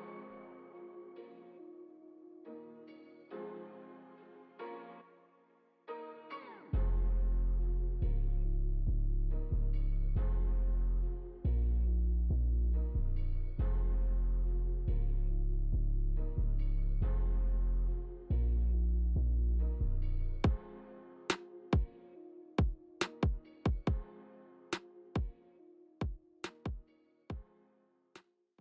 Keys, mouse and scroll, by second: 13.2 click, 14.9 click, 15.3 space, 16.6 scroll down 2, 18.4 scroll down 3.